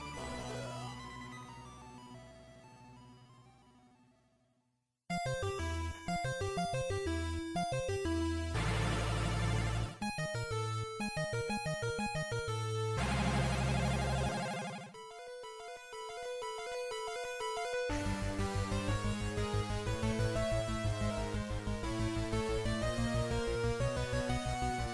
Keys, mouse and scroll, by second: 0.5-1.5 scroll down 1, 5.3-7.0 scroll up 3, 7.0-7.9 scroll up 1, 7.9 middle click, 12.1 click, 15.3 click, 18.3 click.